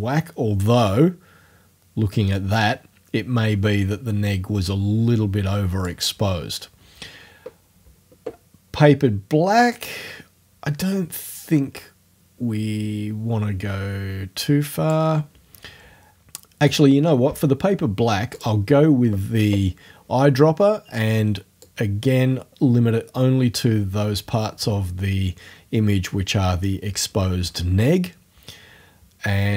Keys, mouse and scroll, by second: 6.1-8.0 scroll up 1, 8.0 scroll up 1, 9.8-15.1 drag, 18.4 click, 21.6-26.3 drag.